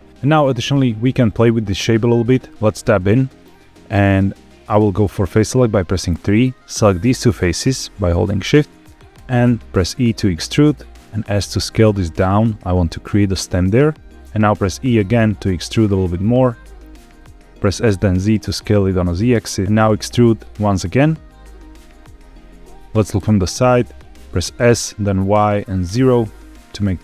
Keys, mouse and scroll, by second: 0.0 middle click, 0.1 click, 0.1 scroll up 1, 0.7 click, 1.0 middle drag, 2.2 Tab, 2.7-3.3 middle drag, 5.2 3, 6.3 click, 7.4 shift+click, 8.1 middle click, 9.0 e, 10.6 click, 10.9 s, 13.4 click, 13.7 middle click, 14.2 ctrl+z, 14.2 `, 14.4 e, 16.0 click, 17.1 middle click, 17.6 s, 17.9 z, 19.1 click, 19.4 middle click, 19.6 ctrl+z, 19.8 e, 21.4 click, 21.7 shift+middle click, 23.1 KP_3, 24.6 s, 25.1 y, 25.8 KP_0.